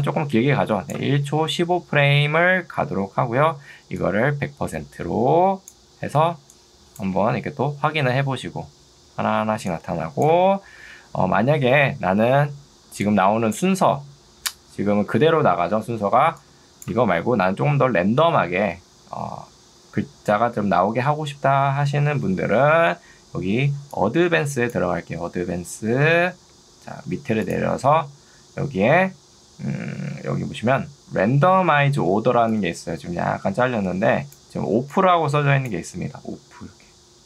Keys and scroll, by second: 7.3 space, 13.7 space, 22.3 ctrl+2, 31.7 ctrl+2.